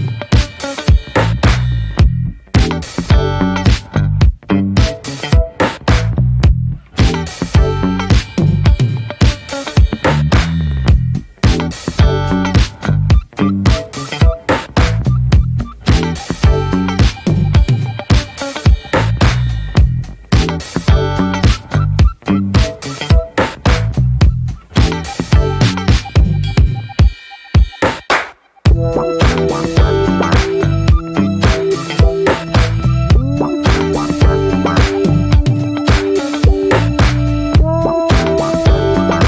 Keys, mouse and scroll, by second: 1.3 click, 1.7 Tab, 2.4-3.2 middle drag, 3.2 drag, 3.6-4.2 middle drag, 4.2 alt+z, 4.5-4.9 middle drag, 4.9 s, 7.0 drag, 7.4 alt+middle click, 8.1 ctrl+s, 8.8-9.6 drag, 10.2 shift+middle click, 10.7 s, 11.9 scroll down 2, 12.2-12.9 shift+middle drag, 12.9 e, 13.8-14.4 scroll down 5, 14.4 drag, 15.2-16.9 scroll up 9, 15.4 shift+middle click, 15.9 middle click, 16.5 middle click, 16.9 alt+z, 17.2-17.8 middle drag, 17.8 drag, 18.3 middle drag, 18.5 alt+z, 18.8 middle click, 19.2 s, 20.7 click, 21.4 alt+shift+click, 21.7 s, 24.4-25.0 scroll down 7, 24.6 Tab, 25.0 middle click, 25.4 scroll up 2, 25.6 Tab, 25.7-26.5 middle drag, 26.5 3, 26.6 click, 27.0 alt+middle click, 27.6 shift+middle click, 28.0 s, 31.4-31.8 scroll down 4, 31.8 shift+middle drag, 31.9-32.4 shift+scroll up 1, 32.4 click.